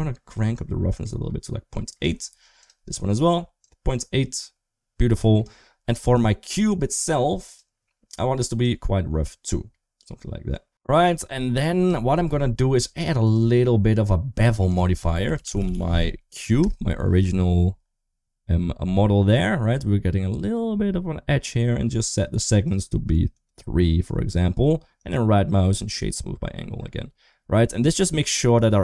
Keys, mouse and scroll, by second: 0.5-1.8 drag, 2.4 click, 3.5-5.2 drag, 5.8 click, 7.3 click, 8.6-10.5 drag, 10.5 Tab, 11.8 shift+middle click, 13.1 click, 14.5-16.5 drag, 22.5 click, 23.2 click, 28.4 click.